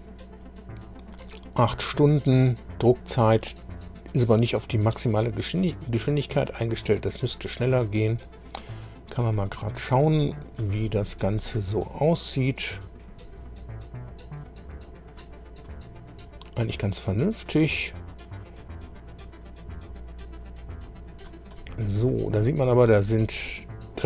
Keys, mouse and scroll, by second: 6.8 click, 9.3-9.7 scroll up 1, 10.1 scroll down 1, 10.6-11.7 right drag, 12.9-15.3 drag, 15.6-16.8 right drag, 18.1-21.4 drag, 21.5-23.7 middle drag.